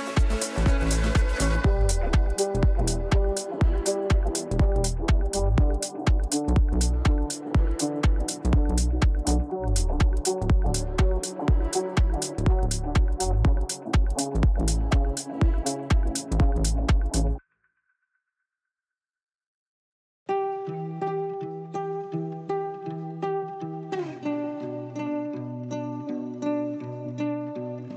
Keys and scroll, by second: 8.4 ctrl+r, 27.6 Down.